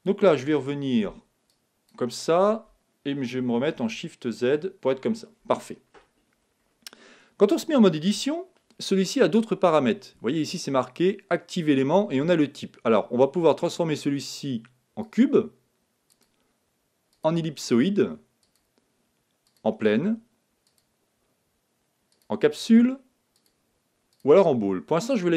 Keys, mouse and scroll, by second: 1.4-3.3 drag, 4.0 shift+z, 5.9 middle click, 6.8-8.0 scroll up 1, 8.0 scroll up 1, 8.2 Tab, 8.2 middle click, 13.6-15.6 drag, 16.0-17.9 drag, 18.4-20.3 drag, 20.6-22.5 drag, 23.3-25.2 drag.